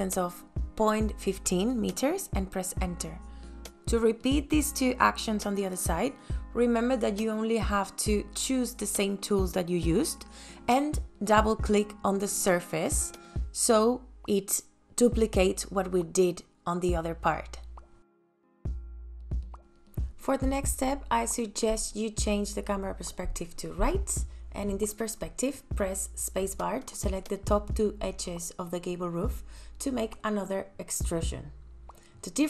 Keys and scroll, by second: 0.2 ,, 0.5 KP_5, 0.7 KP_Enter, 5.0 space, 8.7 f, 14.5 p.